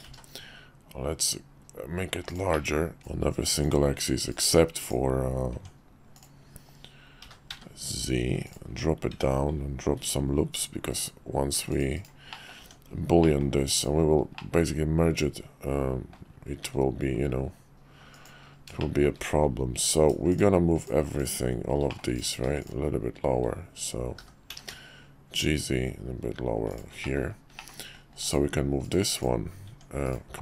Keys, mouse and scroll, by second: 2.6 middle click, 3.0 Tab, 3.0-3.7 drag, 4.8 click, 5.5 Tab, 6.1 click, 7.2 g, 8.6 Tab, 9.9 ctrl+r, 12.3 middle click, 12.6 Tab, 13.2 middle click, 13.7 click, 14.3-16.1 middle drag, 18.1 click, 18.8 shift+middle click, 20.8 shift+click, 21.2 shift+click, 21.9 click, 22.6 shift+click, 24.2 g, 27.0 middle drag, 27.7 middle click, 28.3-29.2 drag.